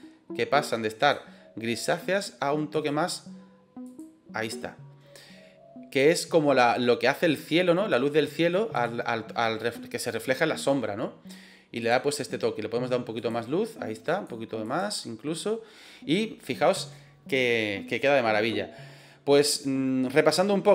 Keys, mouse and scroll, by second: 11.7 click.